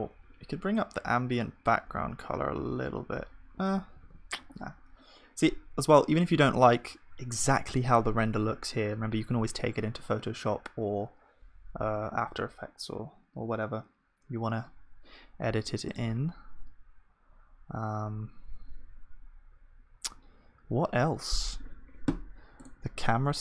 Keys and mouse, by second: 2.6 ctrl+z, 4.0 ctrl+s.